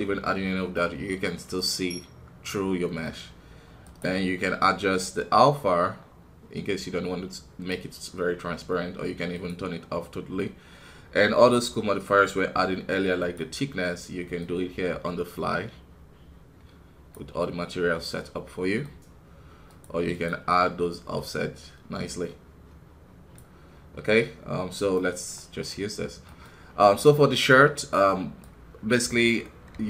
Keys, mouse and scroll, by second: 0.2 scroll down 1, 0.7-3.8 middle drag, 3.8-6.8 drag, 9.3 click, 13.2-17.4 drag, 17.4-20.1 middle drag, 20.1-25.4 drag, 25.4 middle click, 25.9 scroll down 2, 26.2 middle click, 26.5 scroll up 2, 27.0-28.7 right drag, 28.7 scroll down 2, 29.0 middle click, 29.7 KP_1.